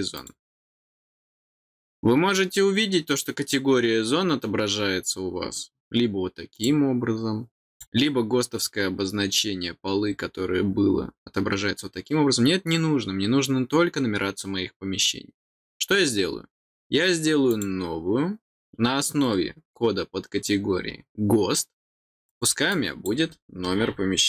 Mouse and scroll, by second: 0.1 click, 6.5 click, 7.7 click, 17.5 click, 22.2 click, 22.7 click.